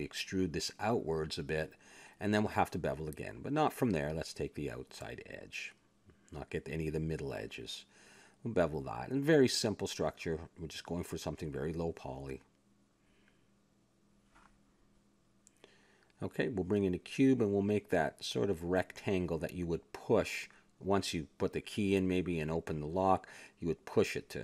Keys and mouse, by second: 0.1 ctrl+KP_3, 1.0 KP_Decimal, 1.9 e, 3.4 ctrl+b, 5.0 a, 5.2 ctrl+Tab, 6.0-9.5 drag, 6.5 a, 9.1 ctrl+b, 10.2 a, 10.4 Tab, 11.2 middle click, 13.3 middle click, 15.4 shift+s, 16.2 shift+a, 17.6 Tab, 18.4 s, 20.1 click, 21.3 s, 22.2 middle click, 23.0 click, 23.9 s.